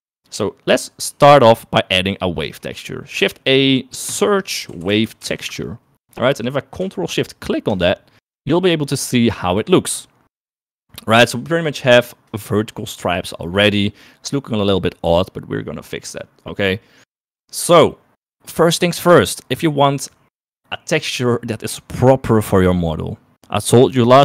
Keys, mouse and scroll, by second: 0.5 middle click, 2.5 middle click, 3.3 shift+a, 8.0 ctrl+shift+click.